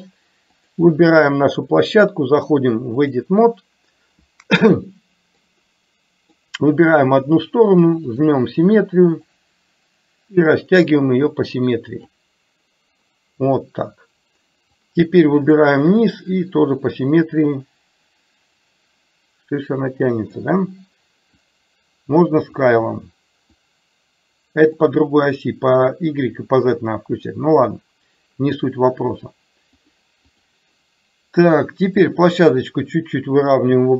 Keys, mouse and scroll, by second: 0.6 click, 2.1-3.2 drag, 5.6 click, 9.3-12.2 drag, 15.0 click, 16.5-20.5 drag, 21.6-22.7 drag, 23.7-24.8 drag, 29.8 click, 32.2-33.9 drag.